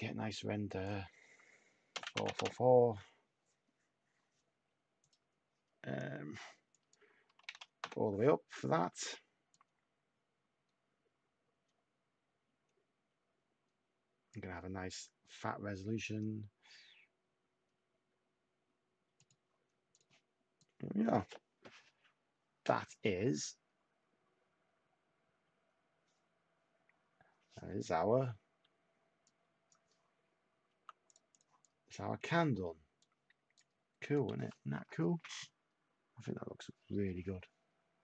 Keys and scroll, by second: 1.9 4, 2.0 Tab, 2.1 4, 2.2 Tab, 2.3 4, 2.4 Tab, 7.8 Tab, 8.3-9.1 typing, 30.6 t.